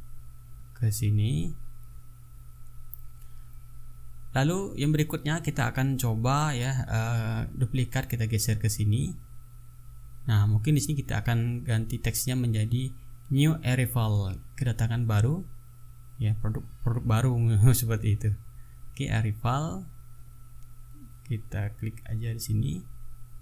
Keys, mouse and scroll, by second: 1.0-4.0 drag, 6.4 ctrl+shift+d, 6.4 ctrl+shift+click, 8.4-9.6 drag, 9.9-11.4 drag, 11.5 t, 12.1 ctrl+click, 12.4 ctrl+a, 15.3-18.6 typing, 21.1 click.